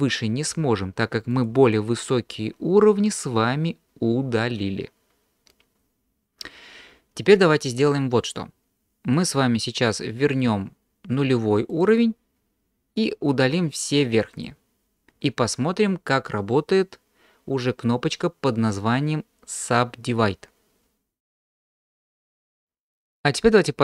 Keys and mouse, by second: 14.4 click.